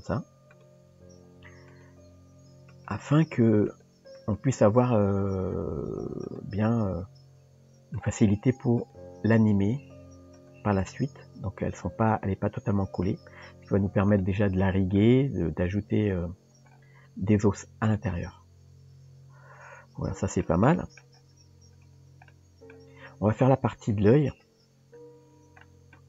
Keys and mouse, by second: 0.5 click, 1.3 r, 1.9 g, 3.3 r, 3.8 g, 6.3 click, 8.2 g, 9.8 s, 13.6 Tab, 14.2-15.0 middle drag, 15.7 KP_Decimal, 17.9-20.4 middle drag, 20.7 shift+middle click, 22.3-22.8 middle drag, 23.9 KP_3, 25.7 shift+middle drag.